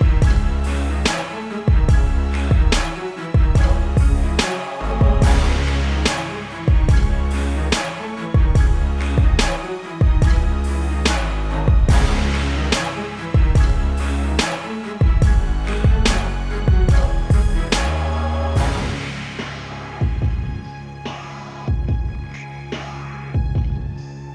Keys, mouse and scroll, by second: 0.4 Return, 6.3-7.1 scroll up 1, 7.1 click, 7.8 typing, 8.9 typing, 9.0-10.4 scroll up 1, 10.4 click, 13.0 click, 13.6 Return, 15.1 alt+click, 16.0 -, 17.0 click, 18.1-20.2 typing, 19.1 click, 20.2 click, 20.8 click.